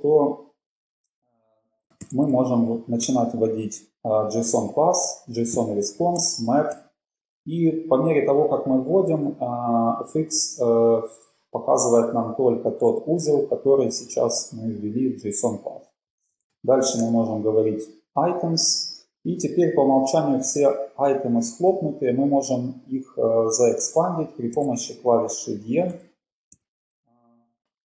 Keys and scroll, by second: 1.9-2.8 typing, 3.1 Return, 5.8-6.9 typing, 16.4 typing, 17.1 Return, 25.9 Return, 26.8 Return, 26.8 e.